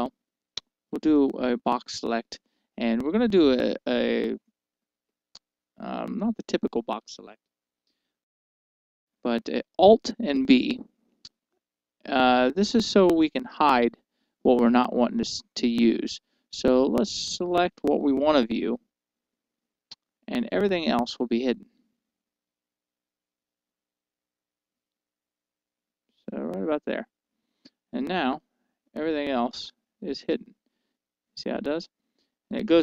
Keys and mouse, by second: 10.4 alt+b, 28.9-31.0 middle drag.